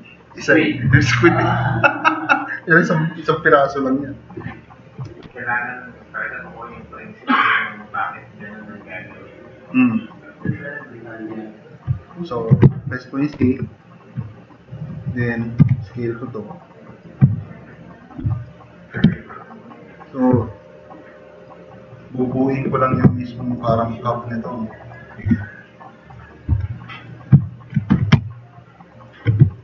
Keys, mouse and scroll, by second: 6.6 middle click, 6.9 middle click, 8.0 click, 8.6 click, 8.8-10.1 drag, 12.0 click, 12.6 c, 13.4 c, 14.0 click, 14.9 click, 15.7 t, 15.7-17.0 drag, 17.4 drag, 18.2 click, 18.6 click, 19.0 e, 19.5-20.2 drag, 20.4-20.8 drag, 22.3 click, 23.2 click, 24.2 click, 25.2 t, 25.5-26.1 drag, 26.5 e, 26.7 click, 27.2 click, 27.9 t, 28.1 click.